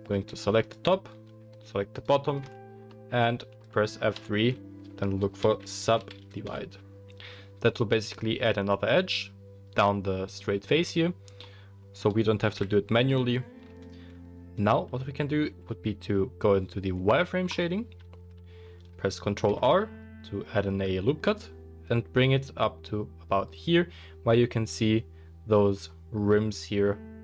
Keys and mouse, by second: 0.6 alt+click, 1.9 alt+shift+click, 2.8-11.6 middle drag, 4.2 F3, 12.0-15.5 middle drag, 12.5 KP_1, 17.5 click, 19.5 ctrl+r.